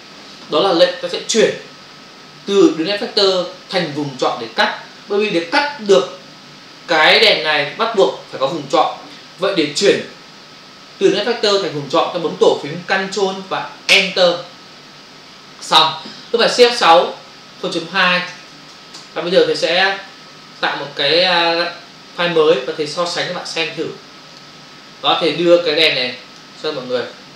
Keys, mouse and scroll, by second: 13.9 ctrl+Return, 17.2 shift+F6, 18.2 typing, 18.9 Return, 21.5 Return, 24.2 click, 24.4 click, 25.9 click.